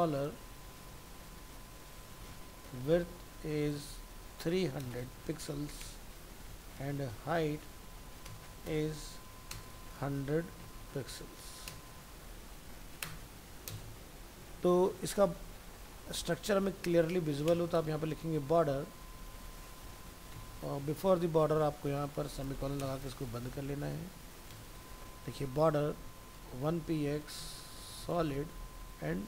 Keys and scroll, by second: 19.1 ctrl+Left, 20.3 ctrl+b, 20.7 ctrl+Left.